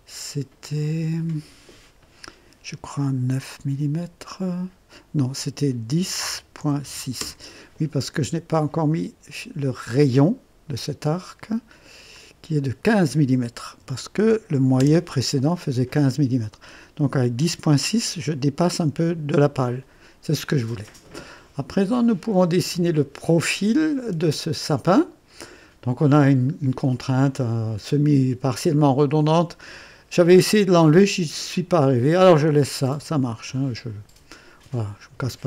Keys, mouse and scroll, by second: 5.6-7.2 typing, 7.2 KP_Enter, 9.7 click, 12.1 click, 13.8 KP_1, 14.2 KP_5, 14.8 KP_Enter, 15.3 typing, 16.3 scroll up 2, 20.7 scroll down 2.